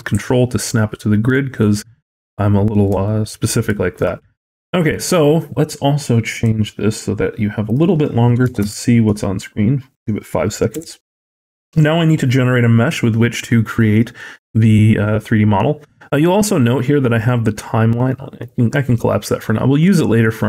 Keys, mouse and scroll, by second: 1.2 middle click, 2.9 shift+middle click, 3.2-3.6 scroll up 2, 3.6 shift+middle click, 4.0 middle click, 6.2 click, 7.5 click, 10.6 n, 17.9 click.